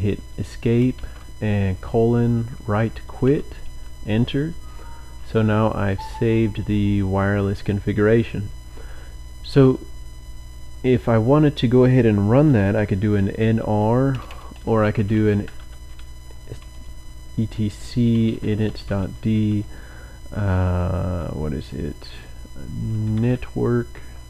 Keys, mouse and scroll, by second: 0.9 typing, 2.1-3.2 typing, 13.0-16.0 typing, 17.9-19.7 typing, 20.8 Tab, 20.9 typing, 22.7-24.2 typing.